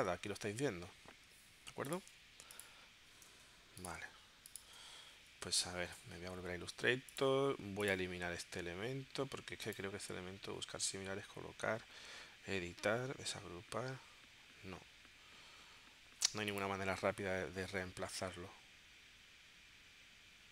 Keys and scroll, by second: 3.4 BackSpace, 4.2 BackSpace, 5.7 super+Tab.